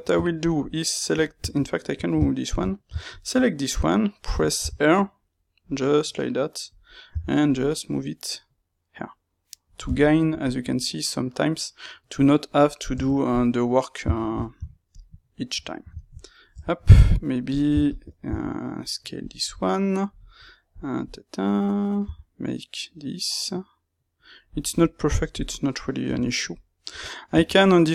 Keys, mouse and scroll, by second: 0.4 alt+click, 2.4 ctrl+x, 3.1 alt+click, 4.6 r, 6.7 click, 7.0 g, 9.9-13.2 shift+middle drag, 13.2 click, 14.9 shift+q, 15.5 Tab, 15.9-17.4 ctrl+middle drag, 16.5 Tab, 17.4 click, 18.2 s, 19.4-27.9 middle drag, 22.0 g, 26.9 Tab.